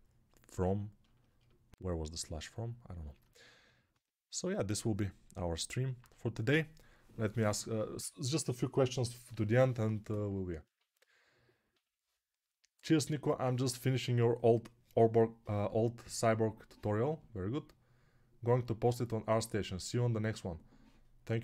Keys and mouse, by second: 0.0-21.4 typing.